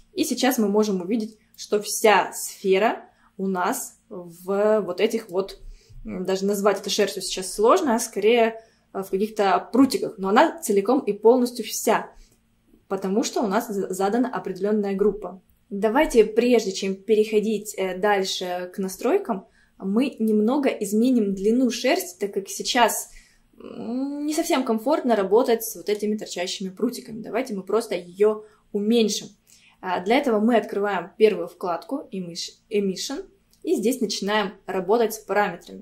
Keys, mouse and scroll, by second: 0.2-0.6 scroll down 2, 1.6-4.7 middle drag, 5.6-6.4 scroll down 6, 6.4-7.5 middle drag, 7.5-9.1 scroll up 4, 9.1-9.6 scroll down 2, 9.6-11.0 scroll up 4, 11.0-12.8 scroll up 1, 12.8-13.5 scroll down 2, 13.5-15.4 scroll down 1, 22.2-25.8 scroll down 2, 25.8 scroll up 1, 26.8-27.2 scroll up 2, 27.6 scroll up 1.